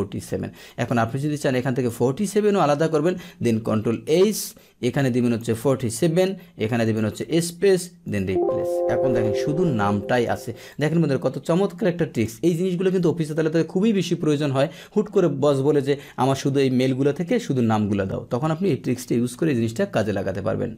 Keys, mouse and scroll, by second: 0.8 click, 3.5 ctrl+h, 4.9-5.3 drag, 6.8 click, 8.0 click, 9.0 click, 10.1 click, 10.6 click, 11.4 click.